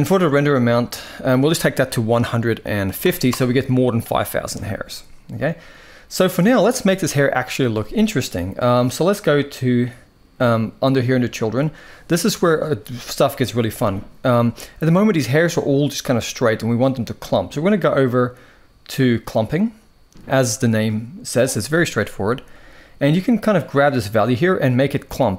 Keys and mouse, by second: 1.0-3.1 drag, 19.1 click, 23.6-25.3 drag.